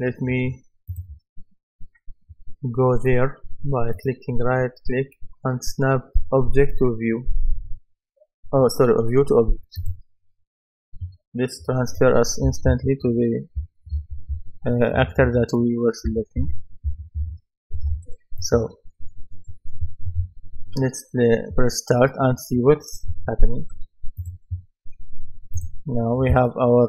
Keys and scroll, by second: 12.2-17.2 typing.